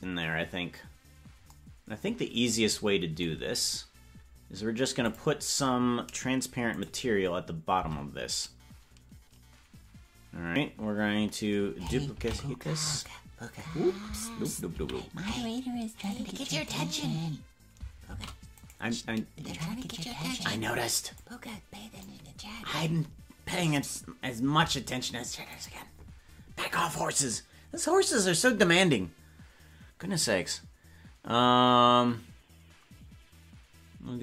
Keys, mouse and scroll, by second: 3.4 scroll up 3, 3.5-4.9 scroll down 1, 4.9 click, 6.7 right click, 7.7 Tab, 16.0 ctrl+z, 16.0-17.2 right drag, 16.0 shift+d, 18.1 shift+d, 21.2 click, 24.6 s.